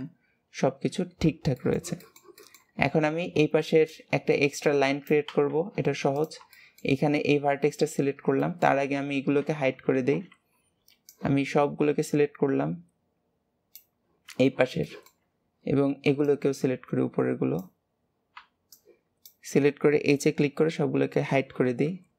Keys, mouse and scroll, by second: 1.5-2.7 shift+middle drag, 2.7-5.7 scroll up 1, 6.1 click, 6.4 shift+middle click, 6.9-7.6 scroll up 3, 7.6-8.1 scroll down 3, 8.4-10.7 shift+middle drag, 10.7 b, 14.7 shift+middle click, 15.2-16.0 scroll up 2, 16.0 b, 17.8-18.3 scroll up 2, 18.3 b.